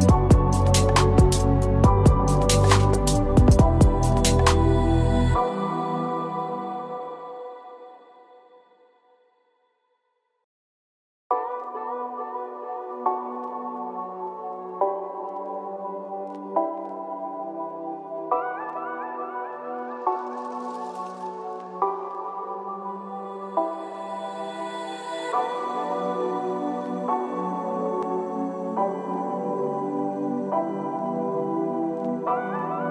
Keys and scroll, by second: 12.5 ctrl+z, 15.6 ctrl+z, 24.5 ctrl+z.